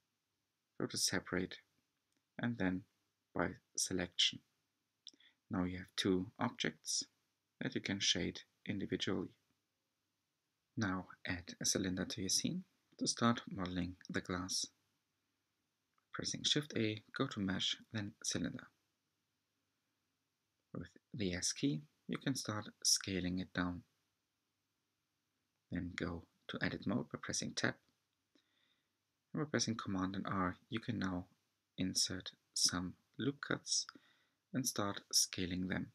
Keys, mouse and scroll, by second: 3.3-4.5 right drag, 4.5 Tab, 5.1 scroll down 3, 5.3-6.2 middle drag, 6.2 drag, 7.5 click, 9.5-9.9 scroll down 4, 10.1 s, 12.7 s, 17.5-17.9 scroll up 6, 17.6 middle click, 17.9-18.6 shift+middle drag, 18.6-20.0 scroll up 4, 18.6-19.0 shift+middle drag, 20.0 s, 23.3 g, 25.1 Tab, 25.8 r, 28.5 scroll up 5, 28.8-29.9 shift+middle drag, 30.3 a, 34.3 alt+shift+click.